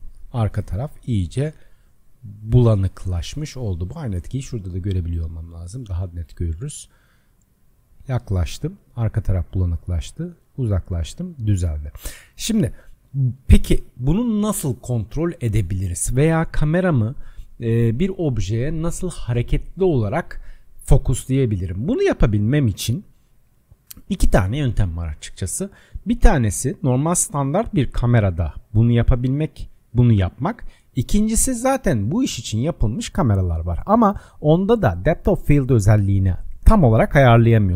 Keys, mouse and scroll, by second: 0.6-1.2 scroll down 2, 1.2-4.2 middle drag, 4.4-5.2 drag, 5.2 middle click, 6.1-6.6 scroll down 1, 6.6-7.7 shift+middle drag, 7.7-8.4 scroll up 5, 8.4 scroll up 1, 8.5-9.5 shift+middle drag, 9.4-10.8 scroll down 6, 10.8-11.6 scroll up 8, 11.6 scroll down 1, 14.7 scroll down 3.